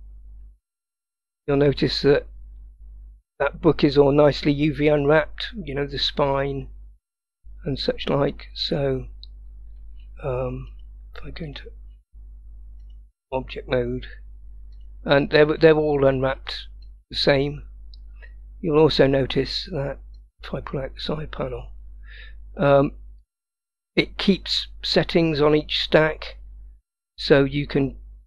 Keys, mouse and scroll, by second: 1.4 click, 2.7-4.2 scroll up 4, 10.8-11.7 drag, 12.9 click, 14.8 click, 15.4 drag, 16.9 click, 20.2 click, 23.3 click, 23.9 click.